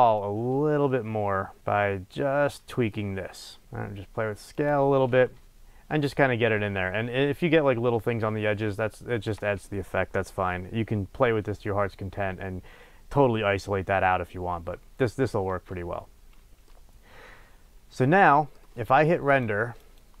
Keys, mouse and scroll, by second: 4.5 click, 16.2-16.7 scroll down 2, 16.7-19.3 middle drag, 19.3-20.2 drag.